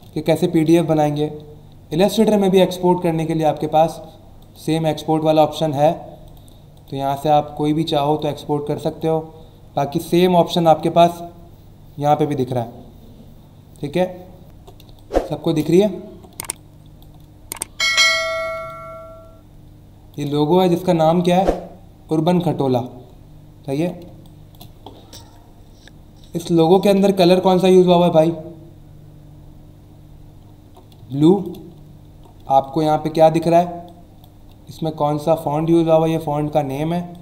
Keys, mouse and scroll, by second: 2.0 click, 3.6 click, 4.4 click, 6.2 click, 6.7 click, 8.1 click, 8.8 click, 14.4 alt+scroll up 1, 14.8 space, 14.9 click, 15.3 space, 15.9 alt+scroll up 1, 16.3 space, 16.5 click, 16.8 space, 18.2 alt+scroll up 1, 18.6 space, 18.7 click, 19.1 space, 20.5 alt+scroll up 1, 23.0 alt+scroll down 1, 23.5 alt+scroll up 1, 24.0 space, 24.2 click, 30.4-30.7 scroll down 2, 31.0 space, 31.1 click, 31.5 space, 31.8 alt+scroll up 1, 32.4 space, 32.6 click, 32.9 space, 33.8 click, 33.9 space, 36.9 space, 37.1 click.